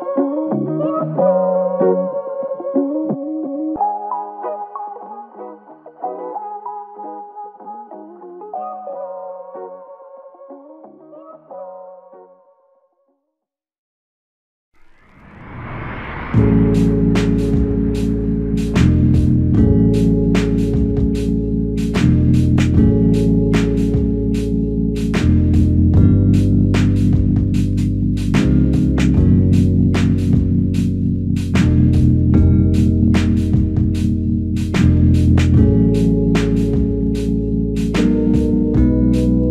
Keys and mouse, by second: 11.0 ctrl+click, 11.9 ctrl+click, 13.9 ctrl+click, 17.1 alt+click, 17.8 w, 19.0 alt+click, 34.5 ctrl+click, 36.1 alt+click.